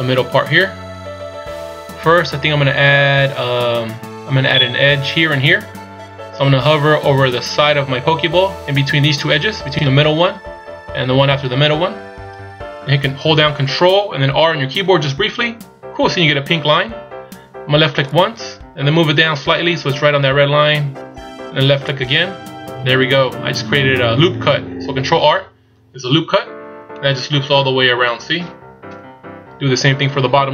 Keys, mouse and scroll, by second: 14.9 ctrl+r, 27.0 middle click, 28.9 KP_1.